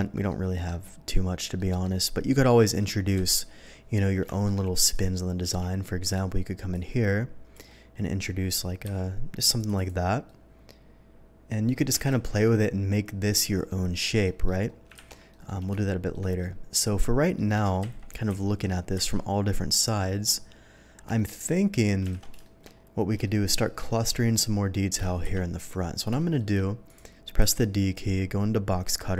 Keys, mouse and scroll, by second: 0.3-0.6 middle drag, 1.5 middle drag, 2.3 middle click, 3.2 KP_3, 4.3 shift+middle drag, 4.9 shift+click, 5.4 d, 6.0 click, 6.7-7.5 drag, 7.6-8.2 middle drag, 8.8 b, 9.5 click, 9.7 click, 10.2 middle drag, 14.2 middle drag, 14.6 KP_1, 15.3 middle drag, 15.8 shift+middle drag, 16.4-17.3 shift+middle drag, 17.8 KP_3, 18.2 KP_1, 18.9 KP_3, 20.2 middle click, 21.1 shift+middle drag, 22.1 alt+a, 22.4 shift+middle drag, 23.1 shift+middle click, 23.8 middle click, 25.2 KP_3, 26.1 shift+middle drag, 26.8 shift+click, 27.3 d.